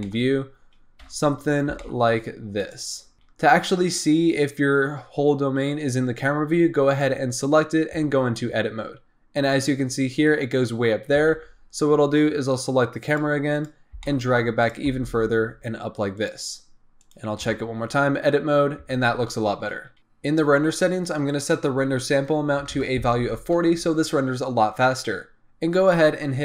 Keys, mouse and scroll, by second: 0.0-1.0 middle drag, 1.0 KP_0, 1.7 g, 3.1-4.9 scroll down 2, 4.9-6.8 scroll up 1, 6.8 click, 8.0 Tab, 9.4-11.6 scroll down 2, 11.6 Tab, 12.2-13.1 scroll up 3, 13.1 click, 13.5 click, 13.9 g, 14.8 g, 17.0 click, 17.5 Tab, 19.2 Tab, 20.0 click, 21.2-24.9 drag.